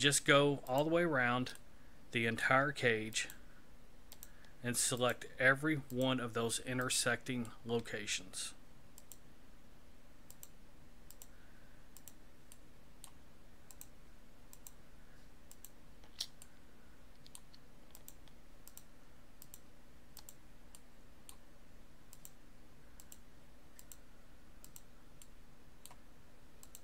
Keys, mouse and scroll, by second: 0.7 shift+right click, 1.6 middle click, 3.1 shift+right click, 4.1 shift+right click, 5.0 shift+right click, 5.9 shift+right click, 6.8 shift+right click, 7.5 shift+middle click, 9.0 shift+right click, 10.3 shift+right click, 11.1 shift+right click, 12.0 shift+right click, 12.5 shift+middle click, 13.7 shift+right click, 14.5 shift+right click, 16.1 shift+right click, 16.4 middle click, 17.9 shift+right click, 18.7 shift+right click, 19.4 shift+right click, 20.2 shift+right click, 20.8 shift+middle click, 22.1 shift+right click, 23.0 shift+right click, 23.8 shift+right click, 24.6 shift+right click, 25.2 shift+middle click, 26.6 shift+right click.